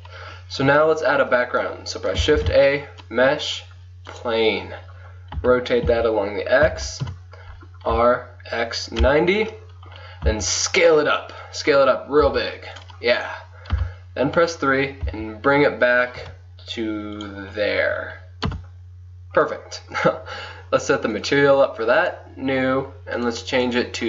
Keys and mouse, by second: 2.4 shift+a, 5.4 r, 8.4 click, 8.8-9.9 drag, 10.3 s, 12.3 s, 13.8 KP_3, 13.9 click, 15.1 g, 15.5 click, 18.5 KP_0, 21.2-23.7 drag.